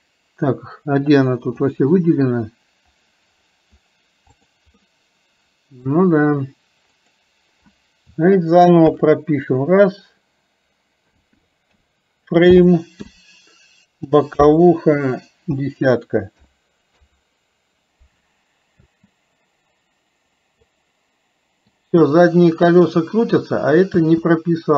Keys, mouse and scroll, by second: 4.9-6.0 middle drag, 7.0-17.1 drag, 20.7-21.9 middle drag.